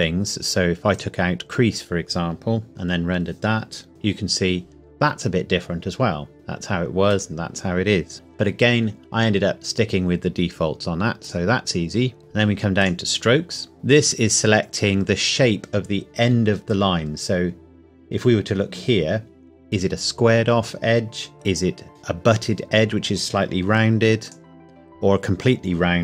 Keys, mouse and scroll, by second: 0.9 click, 2.7 F12, 6.3 click, 11.2 click, 12.2-12.8 scroll down 1, 12.8 click, 13.2 scroll down 1, 13.9 click, 17.4 scroll up 1, 24.2 click.